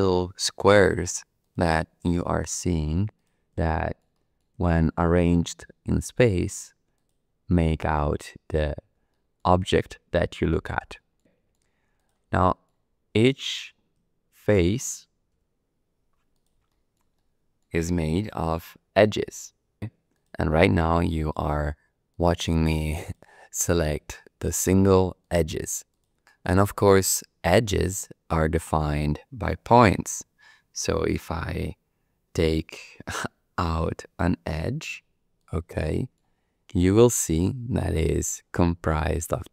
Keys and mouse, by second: 0.7 click, 1.4 click, 2.1 click, 2.5 click, 3.1 click, 3.7 shift+middle click, 4.1 middle click, 4.6 shift+middle click, 5.0 middle click, 5.8 click, 6.4 click, 6.9 click, 9.1 shift+middle click, 9.6 middle click, 10.9 shift+middle click, 11.2 middle click, 11.9 click, 12.5 shift+click, 14.4 shift+d, 15.3 z, 16.3 click, 16.7 shift+click, 17.2 middle click, 18.3 2, 19.1 click, 20.1 click, 21.1 click, 22.1 click, 23.0 click, 23.8 click, 24.4 click, 25.2 click, 25.9 click, 26.2 shift+click, 26.6 middle click, 27.6 shift+click, 28.4 click, 33.6 shift+d, 34.6 z, 35.4 click, 35.8 shift+click, 36.7 1, 37.8 click, 39.1 click.